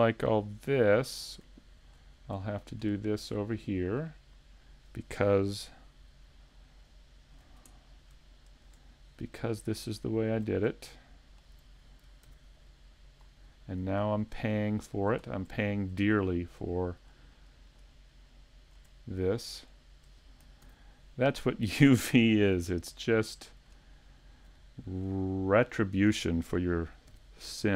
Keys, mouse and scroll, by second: 0.9 middle click, 0.9 scroll up 3, 1.6 shift+middle click, 2.2 scroll up 2, 2.5 shift+middle click, 3.0 middle click, 4.3 right click, 5.5 KP_Decimal, 5.7 scroll up 1, 6.2 scroll down 3, 7.0 middle click, 7.7 middle click, 8.6 shift+right click, 9.1 scroll down 2, 9.4 middle click, 10.9 middle click, 12.3 ctrl+e, 13.5 scroll down 1, 13.8 middle click, 14.3-14.9 scroll down 3, 14.7 shift+middle click, 15.3 scroll down 1, 15.7 shift+middle click, 16.2 middle click, 16.7 shift+middle click, 17.7 right click, 18.1 middle click, 19.8 shift+right click, 20.6 ctrl+e, 21.9 a, 22.3-22.8 scroll down 4, 22.7 middle click, 23.5 shift+middle click, 24.1 middle click, 24.7 shift+middle click, 25.7 middle click.